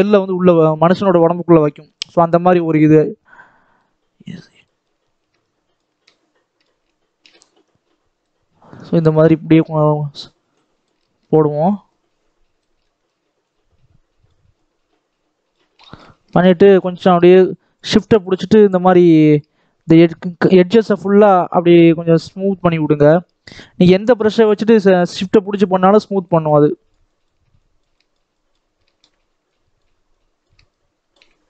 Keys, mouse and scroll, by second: 0.6-1.0 scroll up 1, 3.2-11.0 drag, 11.0 shift+middle click, 11.5-12.7 drag, 12.7 shift+middle click, 13.3-15.6 drag, 15.6 shift+middle click, 16.2-20.6 shift+drag, 20.6 shift+middle click, 21.4-24.7 shift+drag, 24.7 shift+middle click, 25.4-28.7 shift+drag, 28.7 shift+middle click, 29.4-31.4 shift+drag.